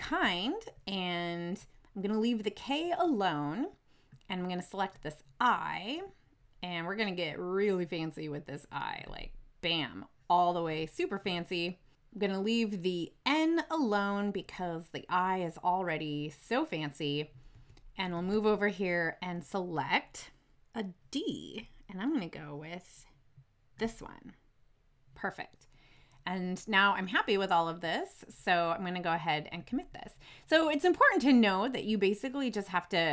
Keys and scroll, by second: 11.1 Right, 17.4 Right, 18.0 shift+Right.